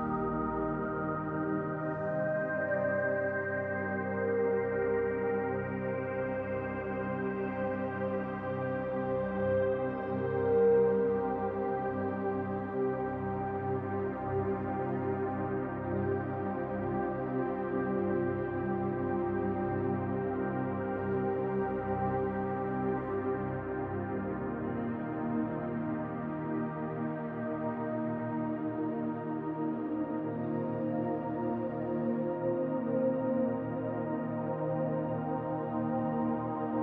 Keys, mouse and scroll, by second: 2.1 click, 2.5-4.7 middle drag, 4.7 click, 5.0-6.9 middle drag, 5.6 scroll up 2, 6.9-7.9 drag, 7.5 f, 8.8-13.5 drag, 13.5-15.0 middle drag, 15.0-18.1 drag, 17.9-18.6 scroll down 3, 18.1-20.0 middle drag, 19.0 scroll up 1, 20.0-22.3 drag, 22.5 scroll up 1, 22.6-24.2 middle drag, 23.2-24.2 scroll up 1, 24.2-30.5 drag, 30.1 scroll down 1, 30.5-33.0 middle drag, 31.5 scroll up 1, 32.0 scroll up 1, 33.0 click, 33.1 scroll up 2, 33.3-34.5 shift+middle drag, 33.8 f, 34.5 click, 35.1-36.8 drag, 36.6 ctrl+z.